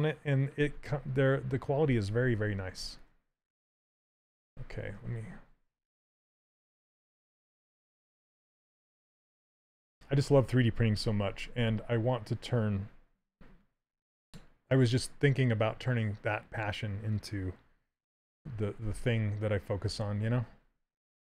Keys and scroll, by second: 10.4 ctrl+z, 10.7 w, 18.5 x.